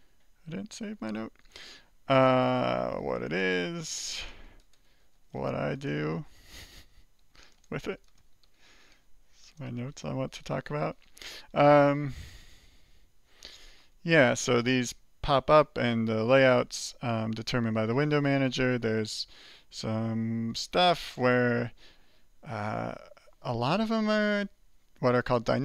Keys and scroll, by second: 5.6-9.5 typing, 11.6 alt+k, 12.1 alt+j, 12.6 alt+k, 13.2 alt+k, 13.8 alt+j, 14.2 alt+j, 14.8 alt+k, 15.3 alt+k, 15.8 alt+j.